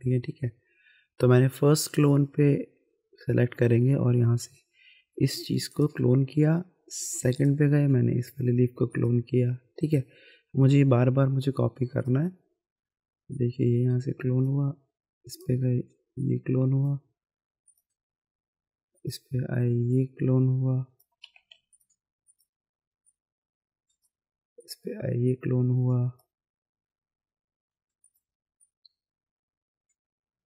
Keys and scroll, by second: 21.3 ctrl+z.